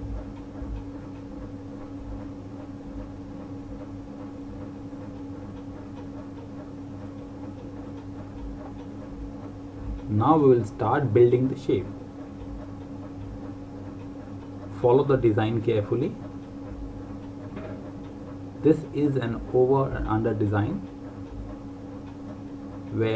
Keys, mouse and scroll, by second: 0.1 click, 13.6 click.